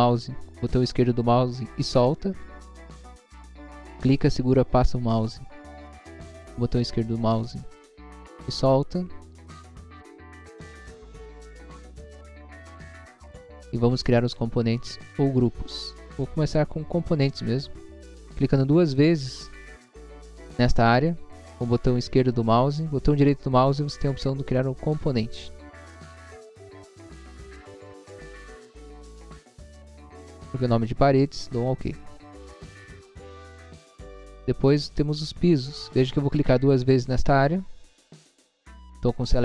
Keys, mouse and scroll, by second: 2.1 click, 2.4 scroll down 1, 3.4 scroll up 1, 4.2 click, 5.3 click, 6.2 scroll down 1, 7.1 scroll up 1, 7.7 scroll up 1, 8.2 click, 8.6 click, 8.8 scroll down 1, 9.4 scroll up 1, 9.8 click, 10.3 click, 11.1 scroll down 1, 12.3 click, 12.7 click, 12.9 scroll down 1, 14.1 click, 14.7 scroll up 1, 15.7 click, 15.9 click, 17.5 right click, 19.0 click, 22.8 right click, 24.5 click, 27.0-28.0 typing, 31.5 click, 33.4 scroll down 1, 34.5 click, 36.5 click, 36.7 click.